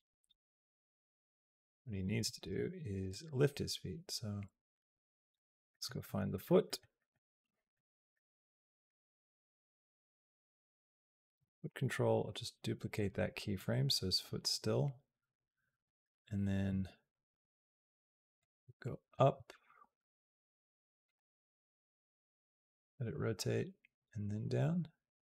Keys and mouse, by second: 1.5 click, 2.9-5.1 drag, 5.5 middle click, 5.9 middle click, 6.1 middle click, 6.5 middle click, 7.3 middle click, 8.0 middle click, 9.3 click, 9.7 click, 10.7 click, 11.3 shift+d, 13.4-15.6 drag, 18.2 click, 19.6 g, 21.8-25.2 drag.